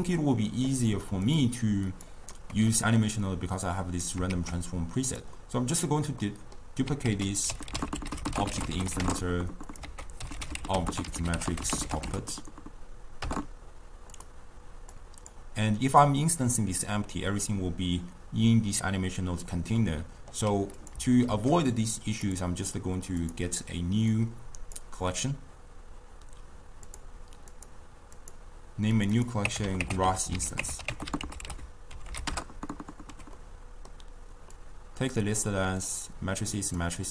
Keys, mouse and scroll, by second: 1.3 click, 1.7 click, 2.4-3.6 middle drag, 3.6 click, 4.8 shift+d, 5.4-7.1 middle drag, 7.1 ctrl+a, 9.9 ctrl+a, 15.0 click, 15.8-18.8 middle drag, 19.8-20.8 middle drag, 20.8 click, 21.8 shift+d, 23.3 drag, 24.2 click, 26.9 click, 27.6-29.1 drag, 29.2-30.4 drag, 30.4 s, 33.4-34.6 middle drag, 34.6 drag, 35.9-37.1 drag.